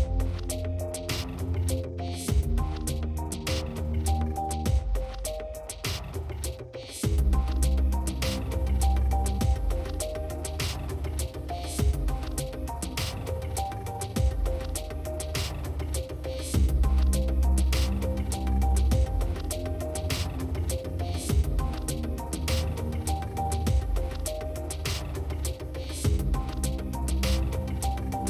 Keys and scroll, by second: 1.9 shift+s, 2.9 shift+s, 8.9 shift+s, 10.0 shift+s, 11.0 shift+s, 11.2 ctrl+z, 13.2-17.4 typing, 15.0 ctrl+z, 21.7 p.